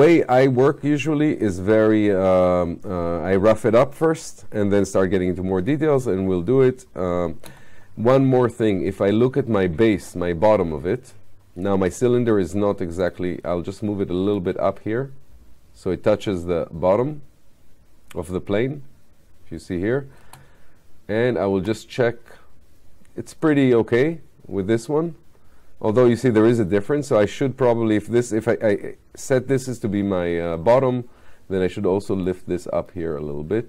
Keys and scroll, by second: 6.6 space, 20.2 space.